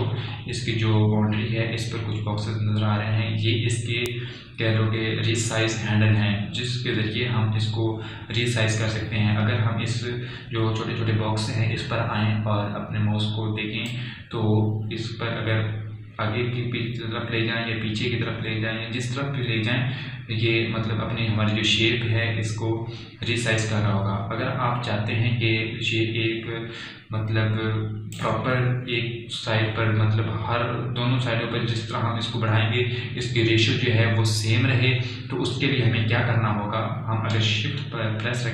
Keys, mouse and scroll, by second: 1.0 scroll down 2, 4.5 typing, 14.9-24.9 drag, 14.9 typing, 31.6 typing.